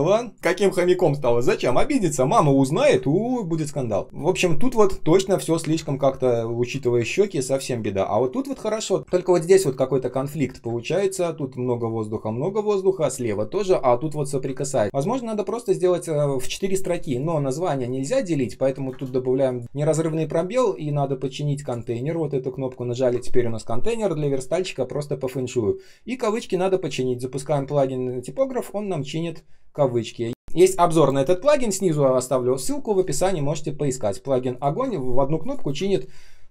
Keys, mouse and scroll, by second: 2.8 Delete, 3.6-4.0 ctrl+scroll down 1, 4.0 space, 5.7 space, 6.2 space, 6.2 space, 7.8 ctrl+scroll up 1, 8.1 space, 9.7 ctrl+scroll down 1, 10.6 space, 14.5 ctrl+click, 18.8 ctrl+alt+space, 27.0 ctrl+/, 27.4 Return.